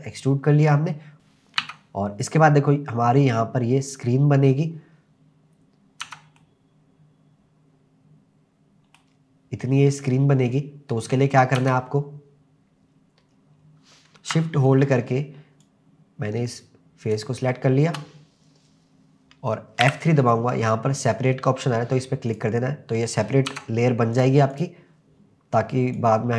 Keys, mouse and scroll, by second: 1.1-1.6 scroll down 1, 1.1 KP_0, 1.6 Tab, 6.0 Tab, 6.4-9.1 middle drag, 11.6 Tab, 12.9-14.3 scroll up 2, 15.6-17.3 shift+drag, 19.9 F3, 23.5 Tab, 24.2 drag, 24.5 click, 26.0 click.